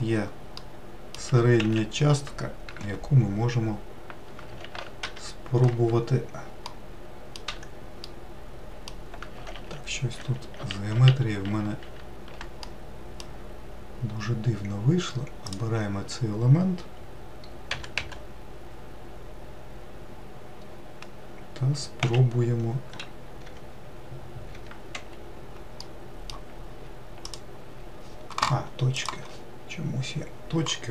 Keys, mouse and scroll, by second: 0.3 middle click, 1.0 g, 6.4 middle click, 7.2 1, 7.8-9.3 middle drag, 9.3 ctrl+z, 9.9 ctrl+z, 10.3 ctrl+z, 10.7 ctrl+z, 11.2 ctrl+z, 12.4-15.2 middle drag, 15.2-17.5 drag, 17.5 g, 25.6-27.0 middle drag, 27.0 ctrl+click, 28.7-30.7 drag, 30.7-30.9 middle drag.